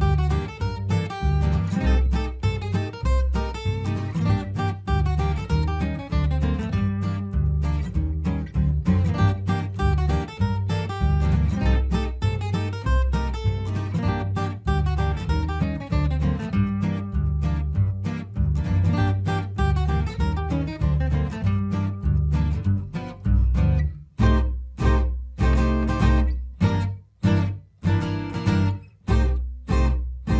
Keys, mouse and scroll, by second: 0.2 click, 1.0 ctrl+g, 1.7 click, 2.9 F4, 3.5 F2, 3.8 click, 4.8 Escape, 5.3-10.8 drag, 10.8 F2, 11.0-13.9 drag, 13.9 right click, 15.0 click, 16.6 F12, 17.5 Escape, 18.2 click, 18.3 F3, 18.6 F2, 19.0 click, 19.5 ctrl+u, 19.8 Escape, 20.1 click, 23.0 ctrl+r, 23.2 Escape, 23.3-25.3 drag, 25.3 c, 25.7 shift+click, 25.8 shift+c, 26.2 click, 28.0 F4, 29.1 click, 29.5 F2, 30.0 click.